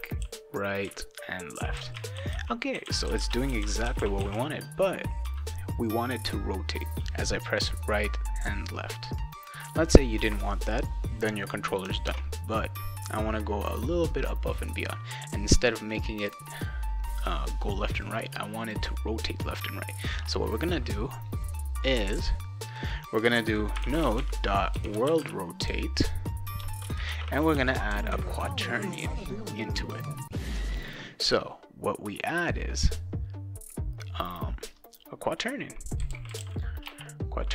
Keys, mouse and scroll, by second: 0.0-4.8 typing, 9.6 click, 12.0 alt+Tab, 14.5-16.0 drag, 16.6 click, 18.0 click, 20.0-21.4 drag, 21.6 scroll down 2, 23.5-28.0 typing, 26.6 Return, 35.7-37.5 typing.